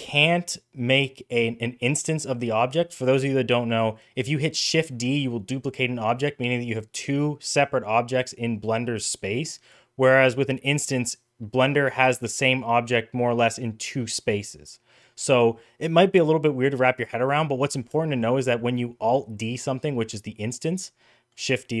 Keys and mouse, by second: 17.4 middle drag, 17.8 shift+middle click, 18.1 middle click, 18.4 middle click, 20.9 middle click.